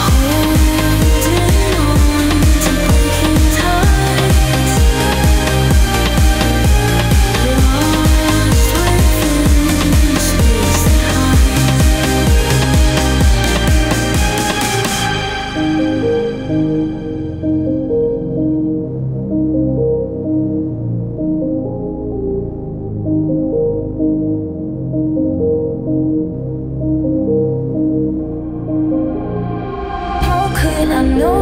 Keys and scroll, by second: 2.1 Delete, 11.0-14.9 typing, 18.2 ctrl+z, 23.0 ctrl+z, 27.1 ctrl+z.